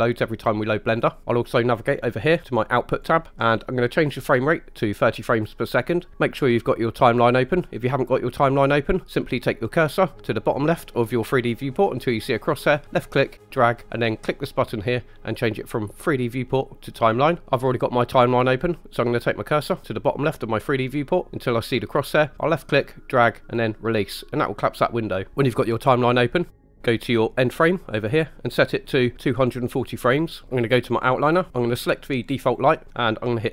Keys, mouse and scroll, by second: 2.9 click, 12.6 click, 14.1-17.3 drag, 17.4 Escape, 22.3 click, 30.0 click, 32.5 click.